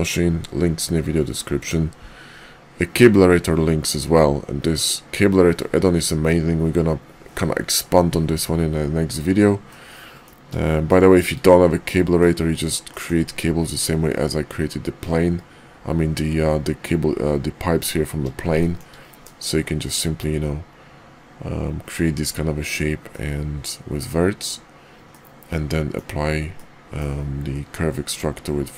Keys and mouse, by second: 9.7 middle click, 10.8 shift+middle click, 11.9 middle drag, 12.9 middle drag, 18.5 shift+middle click, 19.2 middle click, 23.1 middle click, 25.1 middle click, 26.5 middle click.